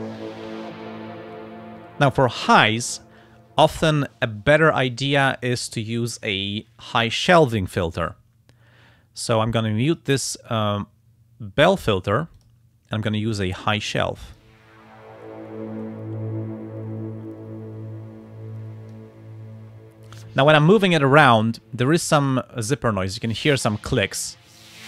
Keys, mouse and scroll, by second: 9.9 click, 10.3 click, 12.4 click, 14.3 click, 15.8-19.1 drag, 24.6-24.8 drag.